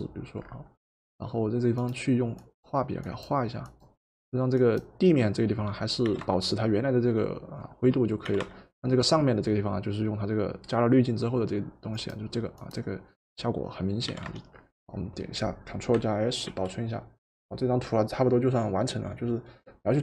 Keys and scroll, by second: 6.2 v, 8.3 v, 14.1 v, 16.5 ctrl+s.